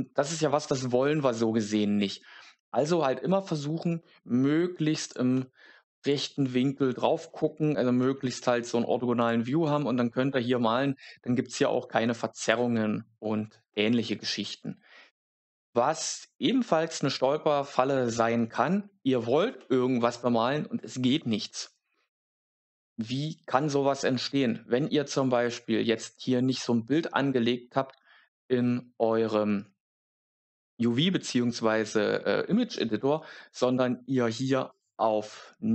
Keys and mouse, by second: 3.9 middle click, 4.9 click, 5.9 click, 9.1 click, 9.5 click, 19.5 shift+middle click, 34.6-35.7 drag.